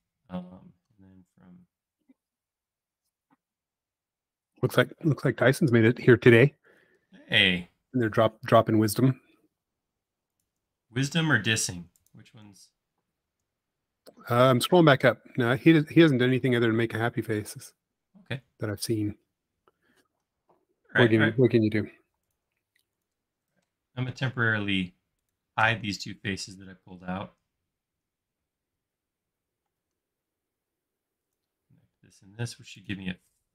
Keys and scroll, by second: 0.9 typing, 16.9 e, 18.1 space, 29.8 |, 33.3 i.